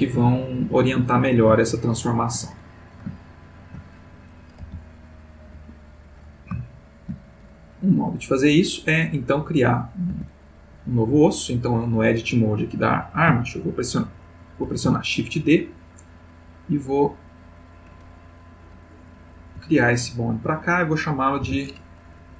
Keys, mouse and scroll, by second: 0.8 Escape, 1.7-2.6 ctrl+middle drag, 3.2-3.9 ctrl+middle drag, 4.6 g, 5.6 Escape, 6.7-7.3 shift+middle drag, 14.6 shift+d, 17.3 click, 19.4 g, 20.4 click, 21.4 F2.